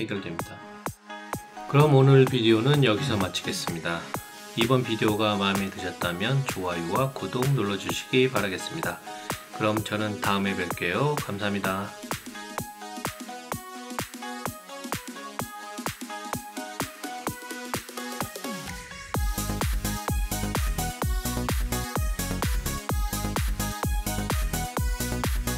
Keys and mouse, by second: 0.1 click, 1.4 alt+click, 2.2 alt+shift+right click, 3.1 alt+shift+right click, 3.4-5.1 alt+drag, 5.3 alt+middle click, 5.8 alt+right click, 6.3 alt+middle click, 6.7 alt+click, 8.5 right click, 8.9-10.8 alt+drag, 10.9 alt+middle click, 11.3-13.2 alt+right drag, 13.4 alt+middle click, 13.5-14.7 alt+shift+right drag, 14.8 alt+shift+click, 15.3 alt+click, 15.5-16.5 alt+shift+right drag, 16.6 alt+shift+click, 17.1 alt+click, 17.5 alt+middle click, 17.7 alt+right click, 18.1-19.2 alt+shift+right drag, 19.4 shift+right click, 19.7 alt+click, 20.0 alt+middle click, 20.4 alt+middle click, 20.8 alt+shift+right click, 21.8 shift+click, 22.0 alt+shift+right click, 22.4 alt+click, 22.6 alt+middle click.